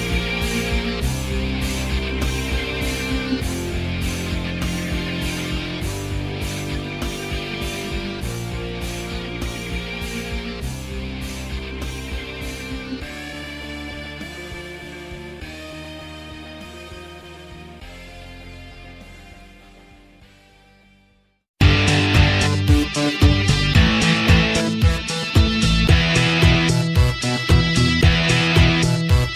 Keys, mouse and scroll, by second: 0.2 alt+middle click, 0.4 alt+click, 0.7 alt+right click, 1.0-2.7 drag, 2.7 alt+middle click, 3.0 c, 3.2 click, 3.3 f, 3.4 click, 3.6 f, 3.7 click, 4.2 p, 4.5 click, 5.4 f, 5.5-8.4 shift+drag, 8.4 alt+middle click, 8.6 shift+click, 8.9 ctrl+z, 9.1 click, 9.5 f, 9.6 click, 9.9 f, 10.0 click, 10.2 alt+middle click, 10.7 p, 10.9 click, 11.5 alt+middle click, 11.6 alt+click, 12.1 alt+middle click, 12.2 click, 12.4 alt+middle click, 12.6 ctrl+z, 12.7-14.6 drag, 14.6 alt+middle click, 14.7 alt+click, 14.9 alt+right click, 15.0 alt+click, 15.6 h, 16.1 click, 16.7 f, 16.8-18.3 drag, 18.3 f, 18.5 shift+click, 18.7 ctrl+z, 19.0 f, 19.0 shift+click, 19.4 c, 19.5 click, 19.8 f, 19.9-21.9 drag, 21.9 f, 22.1-23.1 ctrl+drag, 23.1 alt+right click, 23.4 alt+click, 23.6 alt+right click, 23.8 alt+middle click, 24.0 alt+click, 24.5 alt+middle click, 24.9 alt+right click, 25.1 alt+click, 25.3 alt+middle click, 25.4 alt+right click, 25.6-26.6 drag, 26.6 alt+middle click, 26.7 alt+right click, 26.8 alt+middle click, 27.0 f, 27.1-28.3 alt+drag, 28.3 alt+right click, 28.4 alt+click, 28.5 alt+middle click, 28.8 Tab, 29.2-29.3 drag.